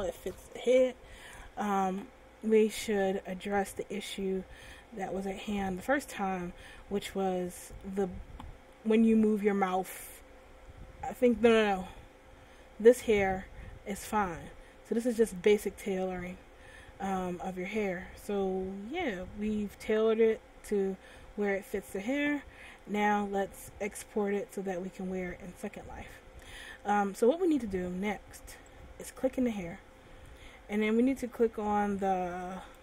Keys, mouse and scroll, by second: 2.6 middle click, 8.9 middle click, 12.1 middle click, 17.3 middle click, 23.0 middle click, 29.6 right click, 32.2 click.